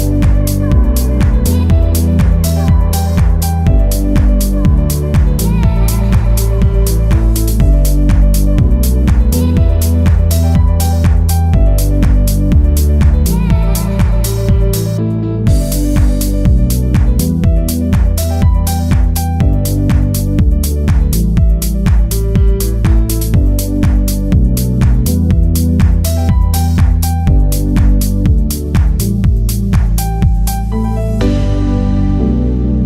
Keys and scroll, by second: 25.0 ctrl+alt+shift+e.